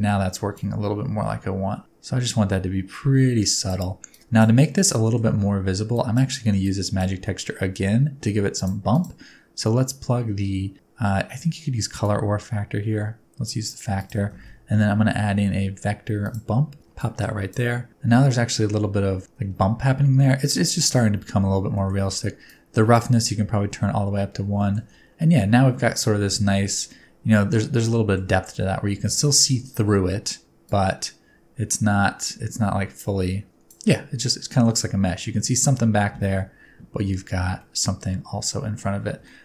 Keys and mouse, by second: 0.5-3.7 middle drag, 4.0-4.4 middle drag, 4.7 middle click, 5.9 middle click, 6.6 middle click, 7.2 middle click, 8.5 middle click, 8.9 middle click, 12.0-13.6 middle drag, 13.9 right click, 14.2 shift+a, 16.9 right click, 21.8 middle click, 22.5 right click, 24.5 shift+middle click, 25.1 middle click, 26.9 middle click, 27.9 middle click, 30.7-33.7 drag, 34.3 middle click, 35.1 middle click, 37.6-38.7 middle drag, 39.2 shift+middle click.